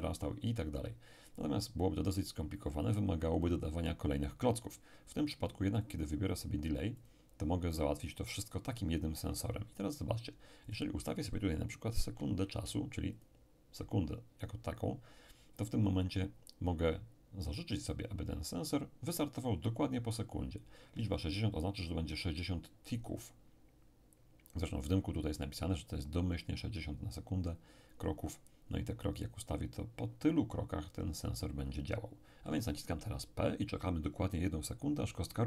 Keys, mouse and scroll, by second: 5.8 click, 7.0 click, 10.7 click, 12.0 6, 12.5 0, 13.1 click.